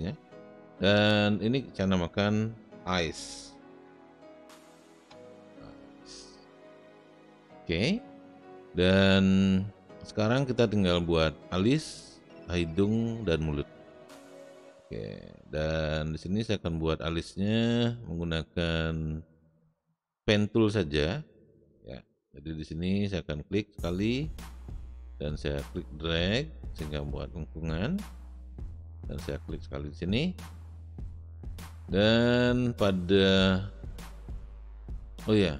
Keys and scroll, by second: 3.5-5.0 typing.